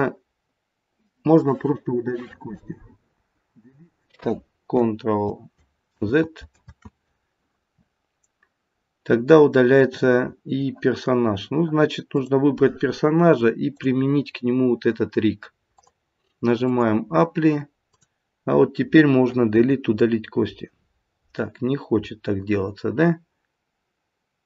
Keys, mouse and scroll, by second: 3.1 Delete, 4.7 Left, 5.2 Left, 5.9 ctrl+z, 6.6 ctrl+z, 9.1-9.5 scroll down 2, 12.0 click, 13.7 click, 15.7 click, 17.9 click, 19.5 Delete, 20.6-21.5 scroll down 5, 21.5-22.4 scroll up 1, 22.4-23.7 scroll up 3.